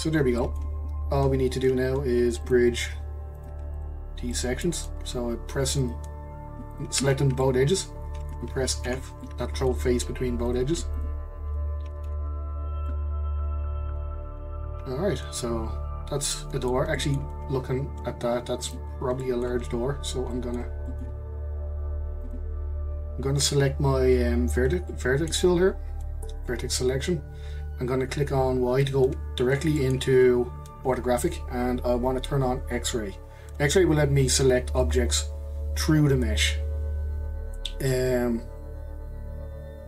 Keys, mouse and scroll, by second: 0.0-0.4 scroll up 1, 0.4 middle click, 1.1-2.4 scroll up 1, 2.4-3.4 drag, 3.7 shift+click, 4.3-5.8 shift+middle drag, 5.8 click, 6.7 shift+click, 7.4-8.8 middle drag, 8.8 f, 9.2-10.5 middle drag, 10.5 click, 10.9 shift+click, 12.1 f, 12.6 scroll down 2, 12.9-15.9 middle drag, 16.9-18.6 middle drag, 18.6 click, 19.2-22.2 middle drag, 22.2-24.9 drag, 24.9-27.9 middle drag, 28.8 click, 29.3-29.8 scroll up 1, 29.8-32.8 shift+middle drag, 34.8 click.